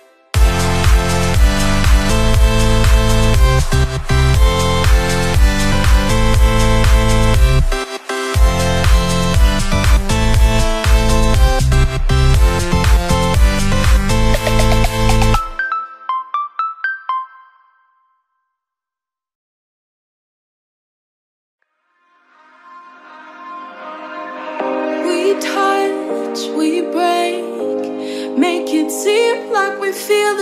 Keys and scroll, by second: 0.1 ctrl+=, 6.3 p, 14.3 ctrl+z, 18.8 ctrl+z, 19.7 p, 21.4 p, 22.7 ctrl+z, 28.0 ctrl+=, 28.6 ctrl+z.